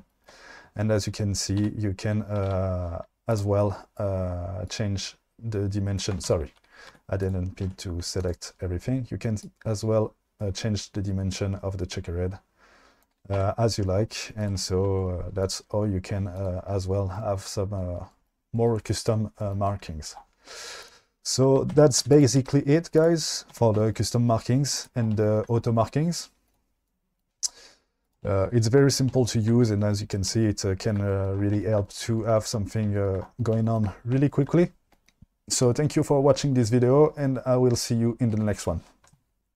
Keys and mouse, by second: 1.6 a, 2.5 a, 3.3 click, 4.7-6.0 drag, 6.3 ctrl+z, 7.0 1, 7.7 2, 9.5-13.1 drag, 13.4 Tab, 14.4 click, 15.5 click, 16.4 click, 21.8 Tab, 22.0 2, 22.4 x, 23.6 Tab, 24.8 click, 28.0 click, 29.2 shift+middle drag.